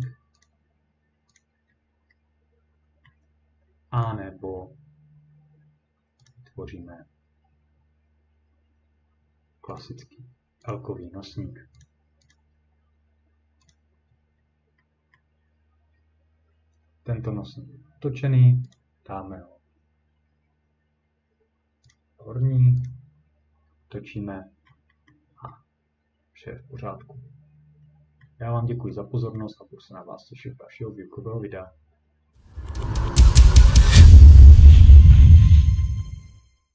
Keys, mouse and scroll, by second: 0.0 click, 0.4 click, 1.4 click, 1.7 scroll down 2, 2.1 scroll, 3.1-3.5 scroll, 4.0 click, 6.3 click, 9.8 click, 10.7 click, 11.8 click, 12.3 click, 13.7 click, 14.1-14.4 scroll down 3, 14.9 scroll, 15.2 middle click, 15.9 scroll down 1, 16.5-17.3 scroll, 18.7 click, 21.9 click, 22.9 click, 23.4-23.9 scroll, 24.7-25.5 ctrl+scroll, 25.5 scroll down 3, 25.6-26.8 scroll down 1, 26.8-27.5 scroll down 2, 27.2 scroll up 2, 27.5 scroll down 3, 27.9 scroll up 2, 28.1 scroll down 1, 28.1 scroll up 2, 28.2 middle click, 28.5 scroll down 2, 29.4 middle click, 29.4 scroll down 1.